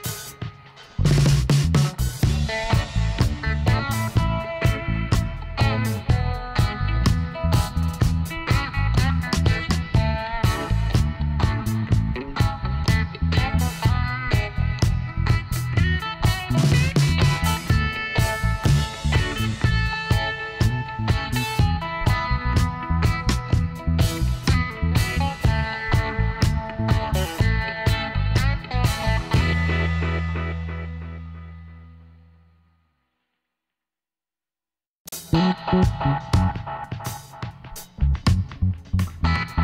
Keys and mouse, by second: 2.1-4.2 right drag, 2.4 g, 5.4 z, 7.1 z, 7.9 middle click, 9.0-10.0 middle drag, 10.5-12.5 middle drag, 12.8 ctrl+r, 20.3 ctrl+z, 21.0-23.7 middle drag, 22.2-23.5 drag, 23.7 right click, 24.0 shift+v, 24.9 shift+v, 26.6 a, 27.2 a, 27.9 w, 30.6 click, 31.1 middle click, 31.5 middle click, 32.3 e, 32.8 click, 35.5 click, 36.6 g, 38.6 ctrl+r.